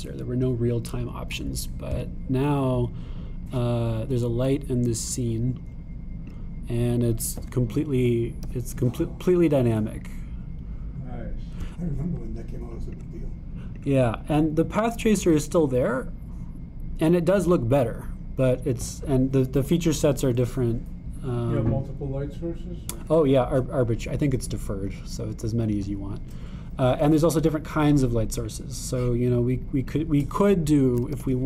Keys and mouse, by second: 3.5 click, 7.3 click, 9.0 g, 14.8-30.9 drag.